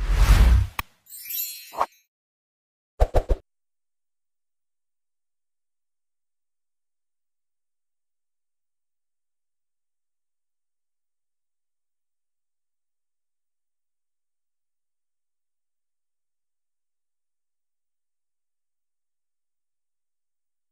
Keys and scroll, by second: 1.2 space, 2.5 alt+space, 4.9 ctrl+alt+space, 6.8 alt+space, 7.1-8.3 typing, 9.5-10.0 typing, 10.1 alt+space, 11.9 space, 12.9 ctrl+space, 15.0 space, 15.7 alt+space, 16.4 alt+space, 17.4 space, 18.4 ctrl+space, 19.0 space, 20.0 alt+space.